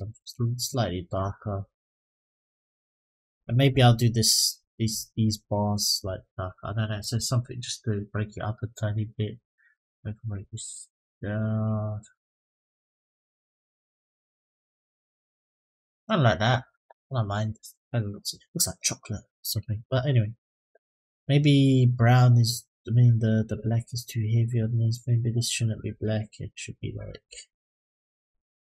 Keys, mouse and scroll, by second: 6.8 click, 20.9 click, 23.2 click, 24.2 click, 25.7 click.